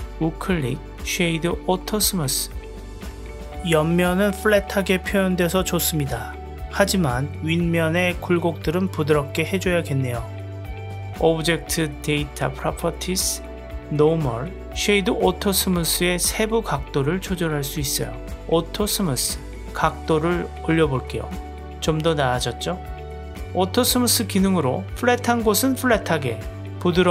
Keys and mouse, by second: 0.4-3.2 right drag, 4.1-4.9 middle drag, 6.9-8.4 middle drag, 13.5 click, 16.0 click, 16.7 click, 18.1-20.0 drag, 21.3-22.3 drag, 23.4-25.6 middle drag, 26.6-27.1 middle drag.